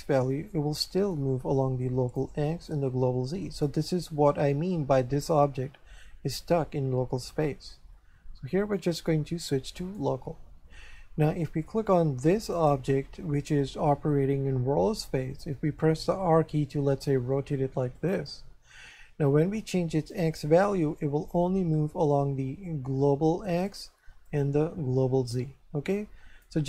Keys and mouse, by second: 2.7 click, 8.6 click, 9.8 click, 12.5 right click, 16.2 r, 17.9 click, 20.1 click, 24.2 click.